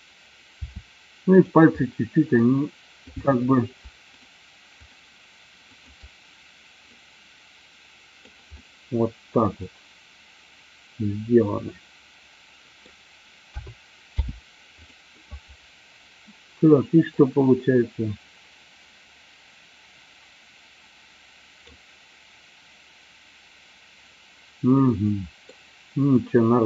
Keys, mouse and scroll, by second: 0.6 r, 1.5 click, 1.9-2.5 middle drag, 3.1 click, 4.1-4.7 shift+drag, 5.0 shift+click, 5.7-6.3 shift+drag, 7.0-8.4 drag, 8.6-12.9 middle drag, 13.5 a, 14.3 i, 17.4-21.7 drag, 25.0 middle click, 26.3-26.6 drag.